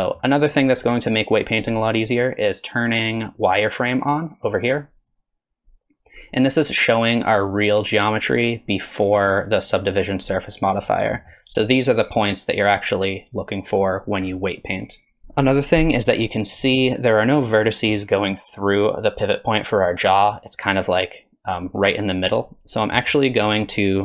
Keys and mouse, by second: 0.0 middle click, 0.7 middle click, 2.7-6.3 drag, 10.4 middle click, 14.8 middle click, 22.8 middle click, 23.5 middle click.